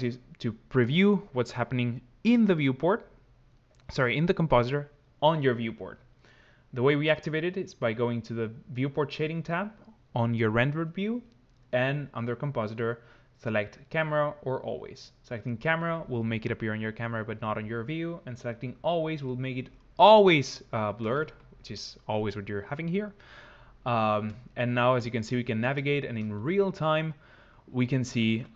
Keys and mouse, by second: 5.8-15.9 drag, 18.3-19.5 middle drag.